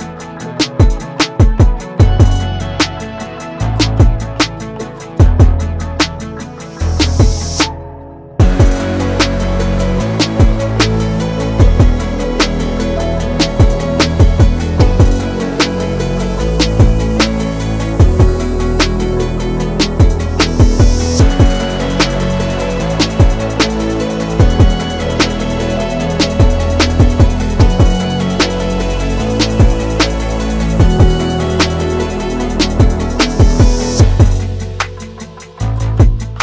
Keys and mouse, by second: 18.9 g, 22.7 2, 23.7 alt+click, 25.1 alt+shift+click, 26.5 ctrl+z, 31.1 ctrl+x, 31.9 shift+click, 31.9 shift+right click, 33.0 3, 33.8 click, 35.1 shift+click, 36.2 shift+click, 36.2 shift+right click.